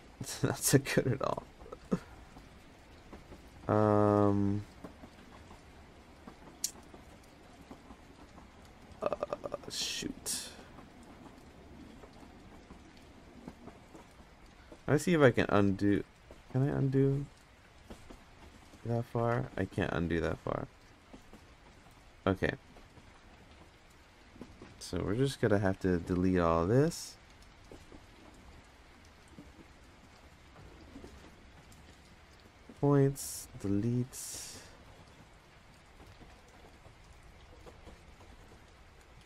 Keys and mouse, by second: 4.9 click, 9.8 middle click, 14.1 middle click, 15.0 ctrl+z, 15.2 ctrl+z, 15.7 ctrl+z, 16.3 ctrl+z, 16.8 ctrl+z, 17.7 ctrl+z, 18.2 ctrl+z, 18.3 ctrl+z, 19.2-21.4 ctrl+shift+z, 22.4 click, 25.6 ctrl+KP_Add, 26.1 ctrl+KP_Add, 26.6 ctrl+KP_Add, 27.3 ctrl+KP_Add, 30.0 ctrl+KP_Add, 31.7 x, 34.0 middle drag, 35.2 click, 36.6 ctrl+KP_Add, 36.8 ctrl+KP_Add, 36.9 ctrl+KP_Add, 37.1 ctrl+KP_Add, 37.3 ctrl+KP_Add, 37.6 ctrl+KP_Add, 38.1 ctrl+KP_Add.